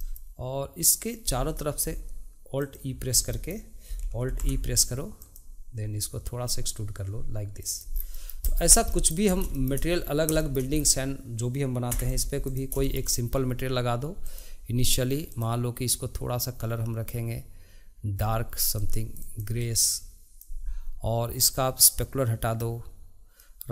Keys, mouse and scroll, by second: 0.0-2.6 middle drag, 2.7 alt+click, 3.3 middle click, 4.3 alt+e, 8.1 middle click, 8.4 click, 8.7 scroll down 2, 8.9 middle click, 9.3 scroll up 3, 9.5 shift+middle click, 10.0 scroll down 2, 10.4 shift+middle click, 10.7-11.9 scroll down 2, 11.9 Tab, 12.1 click, 12.8-14.2 shift+middle drag, 14.2-15.3 drag, 21.9-23.7 drag.